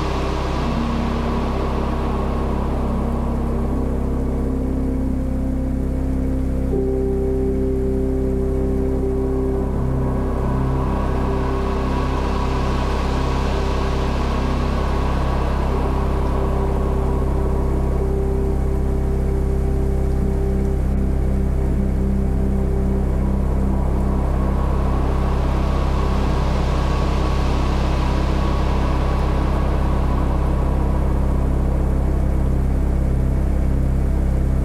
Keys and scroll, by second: 0.0-0.2 typing, 2.8 0, 7.1-9.3 typing, 11.8 x, 12.6 x, 12.9 ], 14.0 space, 14.5 x, 14.8 [, 16.4 x, 16.7 ], 17.8-20.2 typing, 19.8 super+z, 21.7 space, 23.7 space, 28.8-30.1 typing, 32.7 v, 34.0 b.